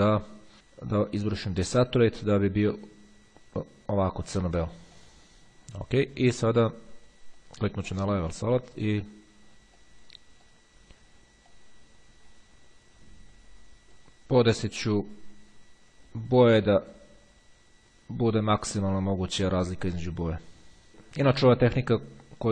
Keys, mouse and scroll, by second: 1.5-2.5 drag, 4.8-5.8 drag, 7.6-9.3 drag, 10.0-11.2 drag, 11.8-14.7 drag, 14.9-17.6 drag, 17.9-20.9 drag, 22.4-22.5 drag.